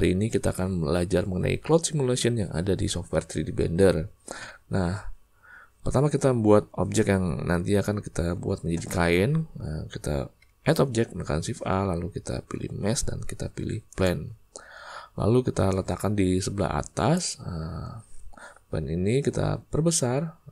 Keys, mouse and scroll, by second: 10.4 shift+a, 15.8-17.1 drag, 19.2-20.1 typing.